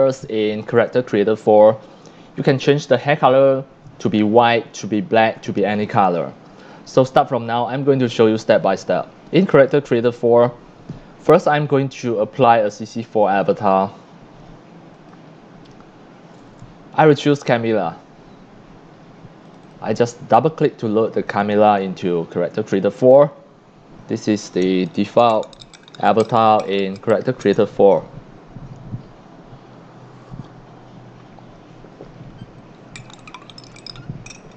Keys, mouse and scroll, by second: 3.3-4.1 drag, 3.3 x, 3.9 c, 8.6 click, 10.3 click, 13.0 click, 14.9 click, 19.4 click, 19.6 click, 22.7-34.5 drag.